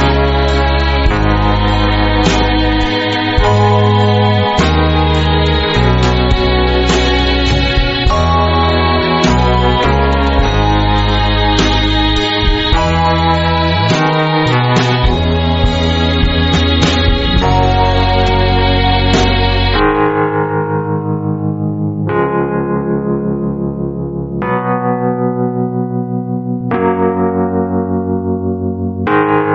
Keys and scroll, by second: 0.0 super+space, 0.1 super+space, 0.1 super+space, 7.9 space, 8.4 alt+super+space, 8.5 alt+super+space, 8.7-10.1 alt+super+space, 15.7-17.9 typing, 17.1 alt+super+space, 17.2 alt+super+space, 17.3 alt+super+space, 19.2 typing, 27.6 a.